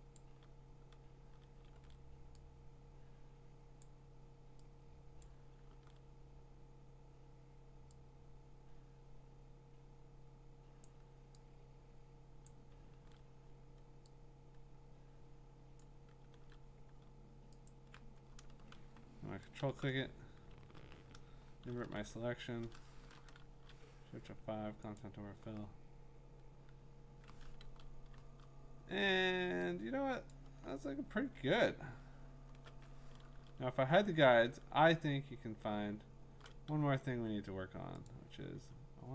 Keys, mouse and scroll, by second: 0.1 click, 1.7 ctrl+d, 3.9 click, 5.2 click, 5.7 ctrl+d, 10.8 click, 12.4 click, 12.9 ctrl+d, 15.8 click, 16.3 ctrl+d, 17.7 ctrl+click, 19.6 ctrl+i, 20.6 ctrl+z, 21.7 ctrl+shift+i, 23.3 F5, 25.0 click, 27.6 ctrl+d, 30.3 click, 31.5-32.4 scroll, 33.3 ctrl+h, 33.3 ctrl+y, 34.0-34.7 scroll, 35.2-35.9 scroll, 37.1 v, 38.1 click, 38.5 v.